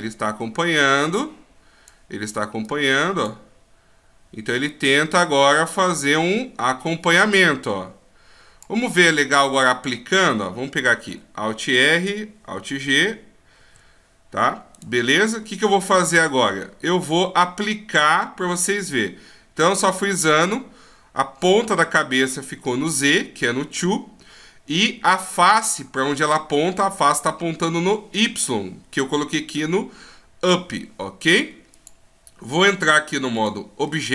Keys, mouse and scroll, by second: 2.7 click, 4.7 click, 8.9 middle click, 10.9 a, 11.1 a, 12.7 alt+r, 13.6 alt+g, 14.8 right click, 16.1 right click, 33.5 click, 33.9 middle click.